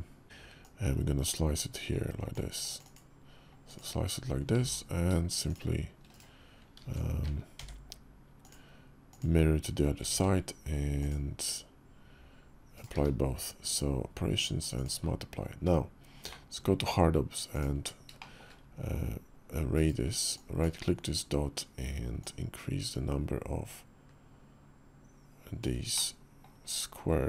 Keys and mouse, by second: 0.2 d, 0.4-2.1 drag, 4.3 alt+x, 5.2 shift+click, 6.6 alt+x, 8.9 click, 9.9 ctrl+`, 12.7 q, 16.0 alt+w, 17.3 ctrl+click, 17.9 shift+drag, 19.5-19.9 ctrl+drag, 19.9-25.5 right drag, 25.7-26.2 middle drag, 26.4 KP_5.